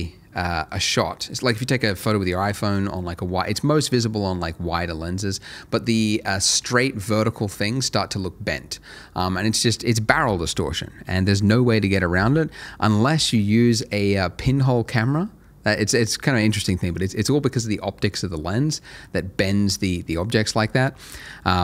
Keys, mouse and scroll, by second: 10.5 middle click, 10.8-11.2 scroll up 1, 11.2 middle click, 11.9-15.3 scroll up 1, 20.4-21.0 scroll up 1, 21.0 middle click.